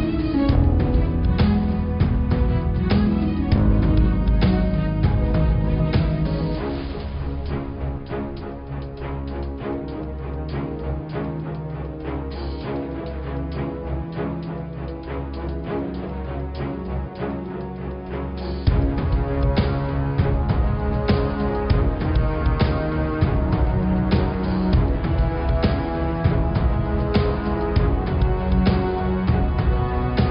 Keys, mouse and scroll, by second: 0.5 shift+click, 0.8 shift+click, 1.1-3.0 middle drag, 3.0 e, 4.1-5.9 middle drag, 5.9-6.9 scroll down 7, 6.9 scroll up 2, 7.7 g, 12.6 Tab, 12.9 middle click, 13.7 click, 13.9 scroll up 3, 14.2 Tab, 14.9 ctrl+r, 16.8 ctrl+r, 23.3 click, 23.9 ctrl+r, 26.0 click, 26.6-27.7 middle drag, 27.7 g, 29.9 middle click.